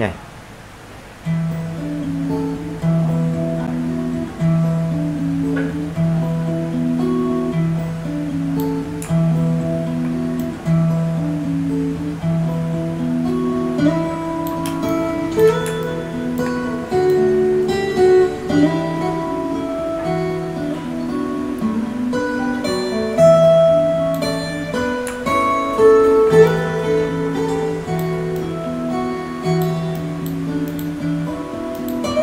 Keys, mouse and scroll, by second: 1.6-2.1 alt+scroll down 1, 2.8-7.7 drag, 7.7 space, 7.8 click, 8.2 space, 8.9 alt+right click, 10.3-19.1 drag, 19.1-19.5 alt+scroll down 1, 20.0 alt+scroll up 1, 20.4-24.8 drag, 29.5-30.0 alt+scroll down 1, 30.0 alt+scroll up 1, 31.6 click.